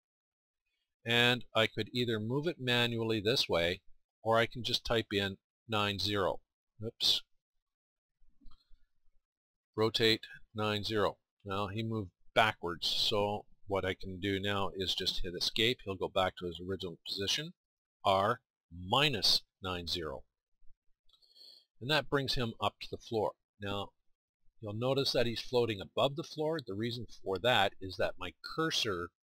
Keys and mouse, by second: 0.0 r, 9.7 r, 18.0 r, 22.2-24.8 middle drag, 25.7 middle click.